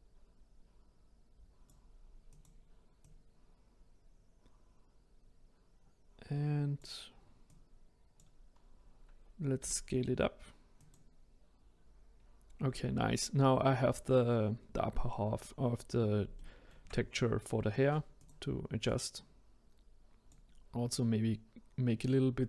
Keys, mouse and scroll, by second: 2.2 click, 3.0 click, 7.4 click, 8.5-9.6 scroll down 3, 9.6 s, 15.5-16.3 scroll up 1, 16.3-18.2 shift+middle drag, 18.2 click, 18.8 click.